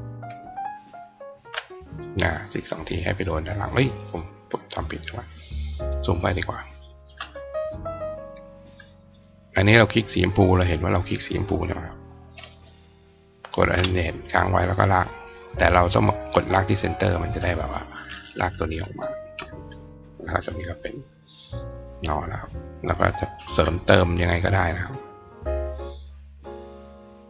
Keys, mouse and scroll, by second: 0.1 alt+click, 1.1 alt+click, 2.2 click, 4.6 click, 5.7 click, 6.5 click, 7.9 click, 9.0 click, 12.4 alt+click, 16.5 click, 19.4 click, 21.4 click, 22.4 click, 22.9 click, 23.2 right click, 24.8 click, 25.4 click, 26.3 click.